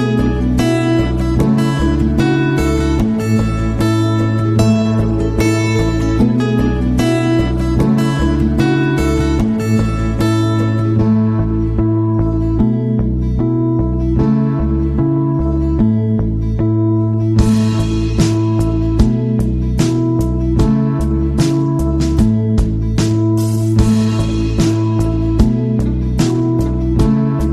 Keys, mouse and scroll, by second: 4.7 click, 5.8 click, 7.3 click, 14.2 click, 16.6 click, 18.5 click, 21.2 click, 22.6 click.